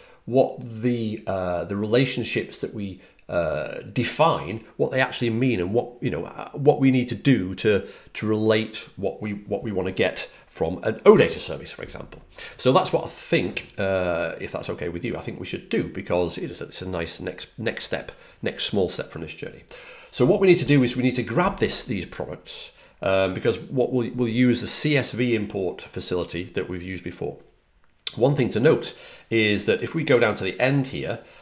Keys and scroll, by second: 30.0 Page_Down, 30.2 Page_Down, 30.3 Page_Down.